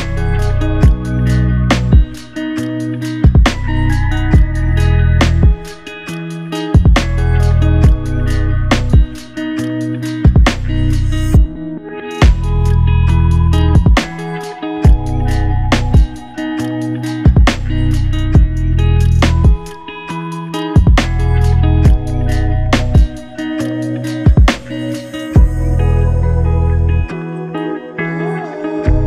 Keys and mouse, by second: 3.6 double click, 5.7 double click, 6.5 double click, 6.7 ctrl+alt+click, 7.3 ctrl+alt+click, 7.5 shift+click, 7.8 shift+double click, 8.2 shift+click, 13.0 f, 15.1 double click, 23.9 ctrl+click, 28.5 double click.